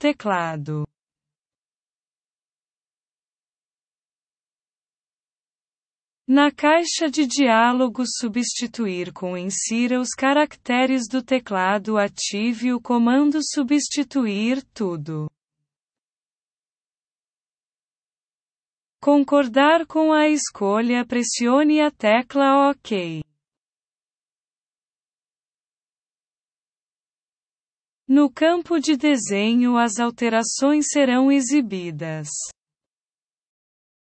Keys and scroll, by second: 8.8 ctrl+v.